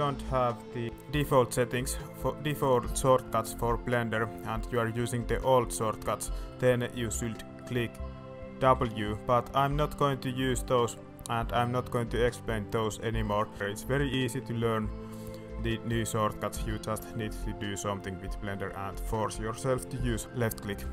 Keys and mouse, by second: 0.2 middle click, 1.2 middle click, 1.7 middle click, 2.3 middle drag, 3.2 middle drag, 3.9 middle drag, 5.1-5.5 middle drag, 5.9 middle drag, 6.4 middle click, 7.4 middle click, 8.6 w, 14.5-14.8 middle drag, 15.3 middle drag, 15.8-16.1 middle drag, 16.4 middle click, 16.9 middle click, 18.5 middle drag, 19.9 middle drag.